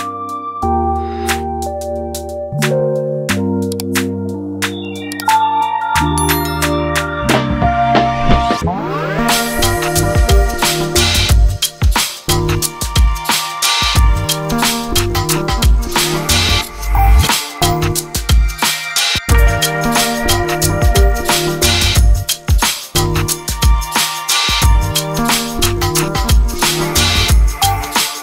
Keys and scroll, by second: 18.5-23.0 typing, 24.7 Return, 24.9-26.3 typing.